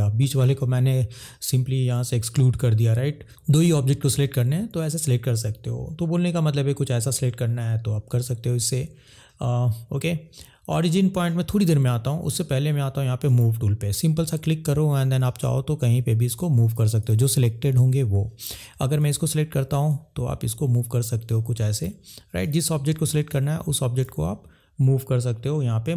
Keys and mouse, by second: 13.3 click, 15.1 click, 23.2 click.